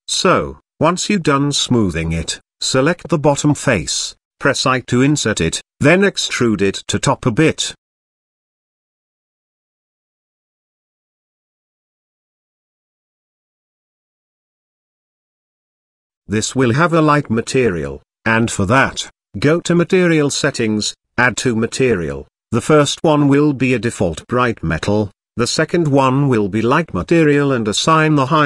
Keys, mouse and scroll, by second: 1.2 click, 1.5 click, 2.4 i, 3.8 e, 5.5 click, 6.0 g, 8.9 e, 10.5 i, 13.6-14.2 middle drag, 16.9 Tab, 17.6 click, 18.3 click, 18.5 click, 19.3-24.0 drag, 24.7 click, 25.5 click, 26.0-27.9 drag.